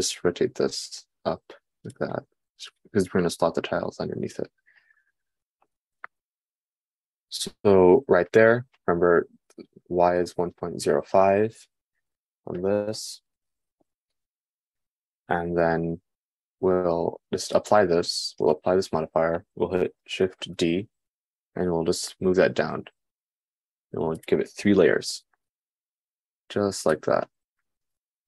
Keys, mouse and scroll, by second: 2.8 g, 18.2-25.0 drag, 21.3 shift+d, 25.0-28.2 shift+middle drag, 25.4 shift+d.